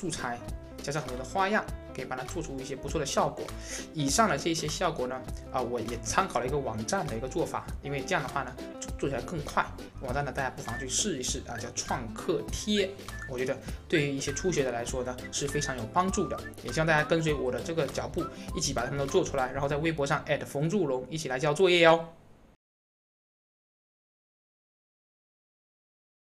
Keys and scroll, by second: 11.3-12.0 typing.